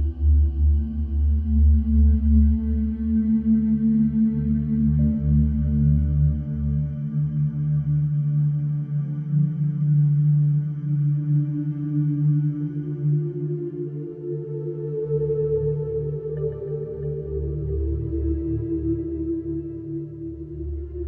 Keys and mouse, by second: 7.2 -, 7.8 7, 8.1 Return, 8.9 i, 10.4 space, 16.7 space.